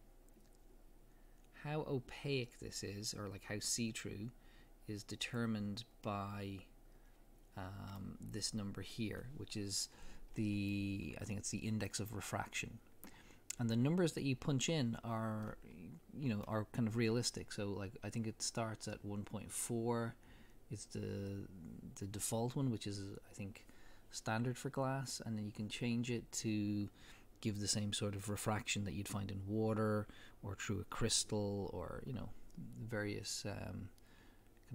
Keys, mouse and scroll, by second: 6.3-19.4 middle drag, 9.9-10.4 scroll up 2, 12.9-13.2 scroll up 2, 13.2-14.8 scroll down 2, 14.8-15.4 scroll down 1.